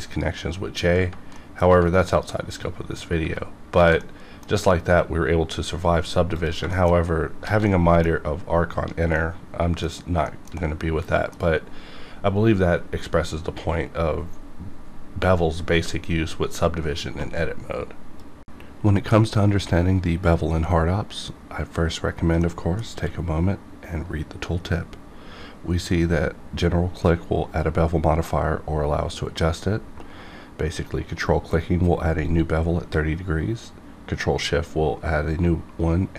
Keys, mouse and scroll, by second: 0.1 click, 1.4 middle click, 2.1 click, 3.4 scroll down 1, 3.8 alt+a, 4.0-6.4 middle drag, 6.4 click, 6.7 shift+middle click, 7.1 scroll up 1, 7.5 alt+a, 7.7 middle click, 8.1 scroll down 1, 9.2 middle click, 9.9 scroll down 1, 10.3 shift+middle click, 10.6-13.7 middle drag, 22.9 q.